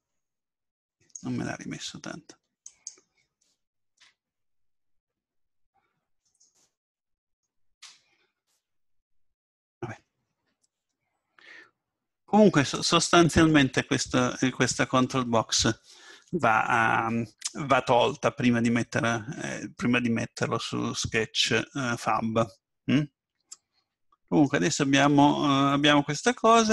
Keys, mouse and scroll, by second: 2.7-7.2 right drag, 4.0 m, 9.0-10.8 middle drag, 12.7-14.6 drag, 14.4-16.3 middle drag, 25.8-26.7 middle drag.